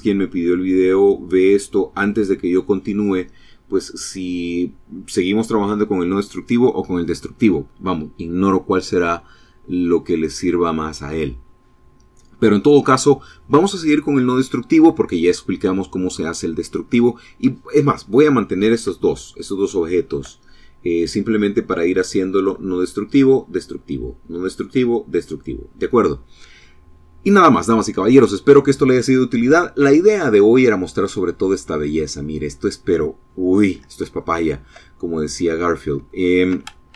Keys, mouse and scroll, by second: 17.7 scroll up 1, 18.4-19.4 shift+drag, 33.4 shift+middle click, 34.4 shift+middle click, 34.9 scroll up 2, 35.2 shift+middle click, 36.1 shift+a.